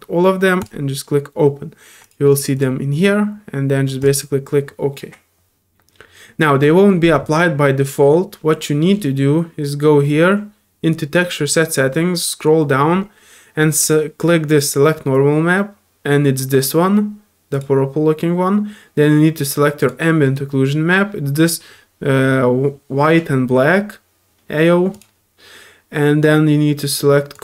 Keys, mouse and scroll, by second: 19.8-25.0 drag, 27.3 click.